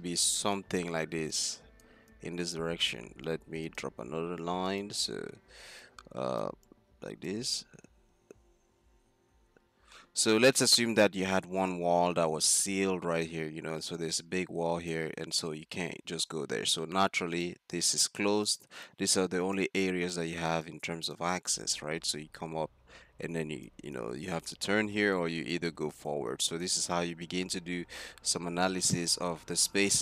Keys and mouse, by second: 0.0 click, 2.6 d, 3.4 d, 7.5-11.7 d, 11.8-15.4 drag, 15.3-21.5 d, 17.4-19.2 drag, 22.0 d, 22.1-27.1 d, 28.0-28.4 drag, 28.7-29.0 drag.